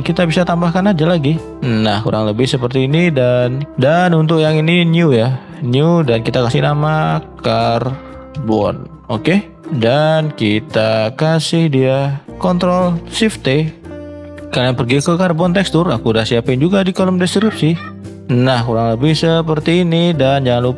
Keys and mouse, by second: 13.4 ctrl+shift+t.